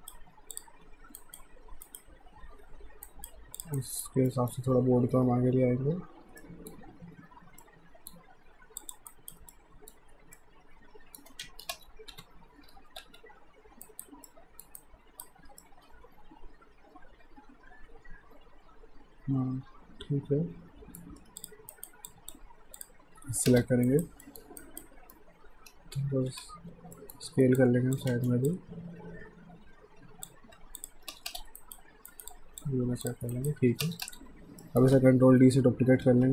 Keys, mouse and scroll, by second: 0.5 click, 1.2 alt+right click, 3.1 alt+right click, 3.6 click, 3.8 alt+right click, 4.3 alt+middle click, 5.1 w, 6.4 alt+middle click, 7.6 alt+middle click, 8.8 click, 9.1 alt+right click, 9.5 alt+middle click, 11.4 ctrl+z, 11.7 space, 12.1 f, 13.9 alt+right click, 14.3 alt+middle click, 14.8 alt+right click, 15.6 middle click, 21.2 q, 21.4 click, 21.7 alt+right click, 22.1 alt+click, 23.5 space, 23.9 alt+right click, 24.3 alt+middle click, 24.6 alt+right click, 26.3 r, 27.0 alt+middle click, 27.6 click, 28.1 ctrl+z, 28.5 click, 30.6 q, 30.8 click, 31.1 space, 31.6 alt+right click, 32.3 click, 33.4 right click, 33.9 space, 34.6 alt+middle click, 36.1 ctrl+d.